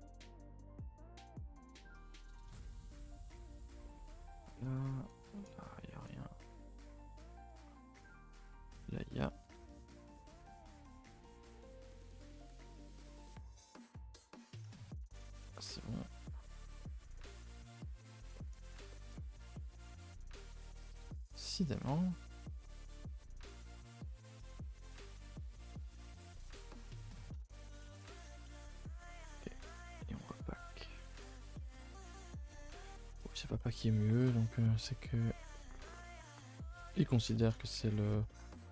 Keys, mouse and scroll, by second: 1.8 click, 2.1 g, 9.2 click, 9.4 s, 11.9 click, 12.5 g, 20.0 a, 20.2 a, 21.0 alt+click, 21.4 g, 25.0 a, 25.7 a, 26.5 a, 26.7 a, 29.7 a, 30.4 n, 31.2 click, 32.8 n, 36.8 a, 36.9 a, 38.6 scroll down 2.